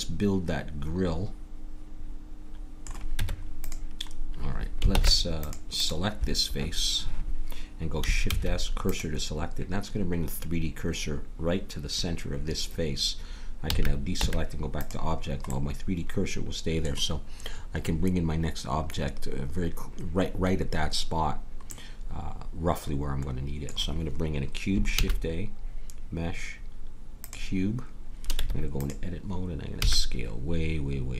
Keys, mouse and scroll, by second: 3.1 Tab, 4.9 ctrl+Tab, 8.2 shift+s, 13.6 a, 14.2 Tab, 21.7-23.5 middle drag, 24.9 shift+a, 28.4 Tab, 29.8 s.